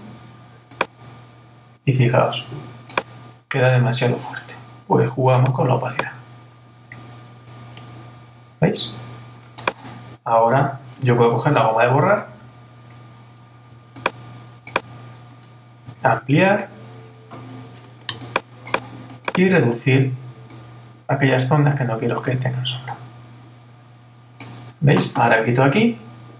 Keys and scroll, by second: 16.1 super++.